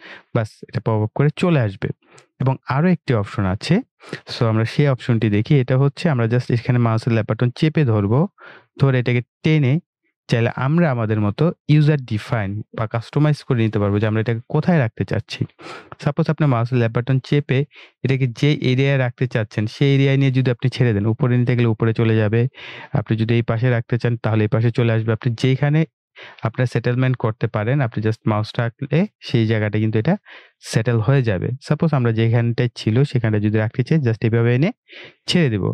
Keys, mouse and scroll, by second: 2.6 click, 6.6-35.7 drag.